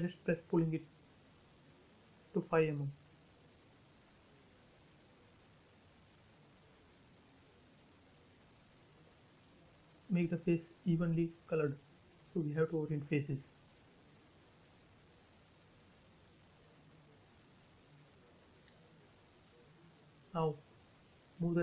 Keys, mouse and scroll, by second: 5.1-6.2 typing, 5.8 Return, 7.1-7.5 scroll down 1, 8.9 click, 9.2 right click, 11.4 click, 12.0 space, 12.1 middle click, 12.5 scroll down 1, 13.0 click, 13.3 right click, 14.1 click, 14.3 space, 14.4-14.7 scroll down 1, 16.4 click, 17.3 space, 17.5 scroll down 1, 18.5 click, 18.6 click, 18.8-19.3 scroll up 1, 19.9 middle click, 20.4 scroll down 1, 21.3 click.